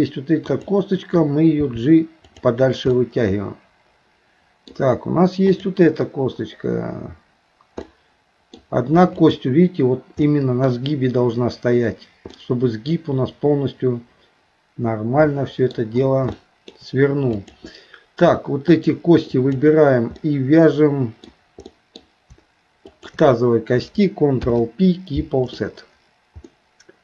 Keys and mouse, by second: 0.5 click, 1.6 g, 3.0-4.7 middle drag, 5.5 click, 7.9 middle click, 9.2 click, 10.3 middle click, 12.3-15.7 middle drag, 16.3 shift+middle click, 17.4 click, 18.7 shift+click, 19.4 shift+click, 20.2-21.2 middle drag, 21.7 middle click, 22.9 shift+click, 24.4 ctrl+p, 26.5-27.0 middle drag.